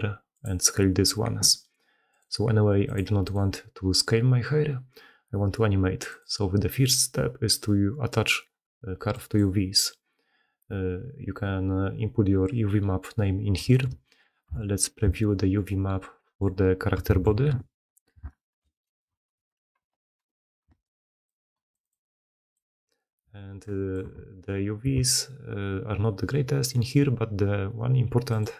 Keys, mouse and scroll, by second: 7.5-9.4 drag, 14.4 h, 17.5 ctrl+shift+h, 18.3 ctrl+shift+w, 19.9 ctrl+shift+q, 20.6 ctrl+shift+q, 23.6 click, 24.0 Tab, 24.7 a, 26.6 middle click.